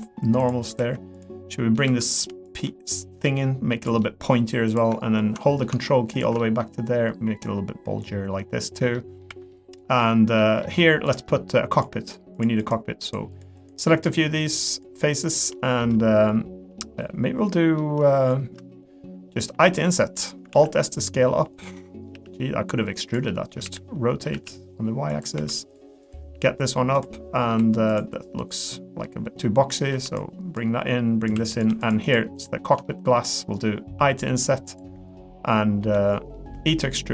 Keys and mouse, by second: 0.8 2, 1.1 click, 1.5 middle click, 2.1 click, 3.0 click, 4.0 middle click, 4.7 click, 5.4 middle click, 6.4 middle click, 7.4-8.7 drag, 8.9 middle click, 9.3 3, 9.5 middle click, 10.0 middle click, 10.6 middle click, 11.0 click, 11.3 middle click, 11.7 click, 12.4 shift+click, 12.6 shift+click, 14.5 shift+click, 14.7 shift+click, 15.5 middle click, 16.8 middle click, 17.5 middle click, 19.5 i, 20.5 alt+s, 21.7 middle click, 22.1 g, 23.3 middle click, 23.6 r, 25.3 2, 26.3 g, 27.1 middle click, 27.6 2, 27.9 click, 28.5-29.7 drag, 29.9 1, 30.1-31.3 drag, 31.3 3, 31.8 shift+click, 32.0 shift+click, 32.3 shift+click, 32.8 middle click, 33.9 i, 36.3 middle click, 36.7 e.